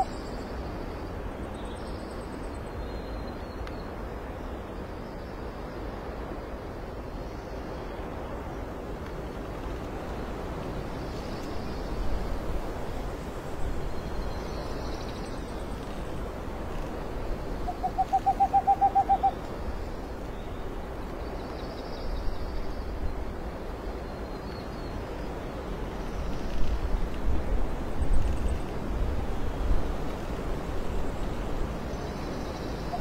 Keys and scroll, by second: 1.2 alt+space, 2.0 alt+space, 2.5 alt+space, 3.2 alt+space, 5.5 space, 6.2 space, 7.7 space, 9.0 space, 9.6 alt+space, 10.7 space, 12.2 ctrl+z, 12.5 ctrl+alt+space, 13.0 ctrl+z, 15.4 alt+space, 18.1 alt+space, 18.4 ctrl+j, 19.4 alt+space, 20.2 ctrl+alt+t, 24.3 ctrl+alt+t, 25.3 ctrl+j.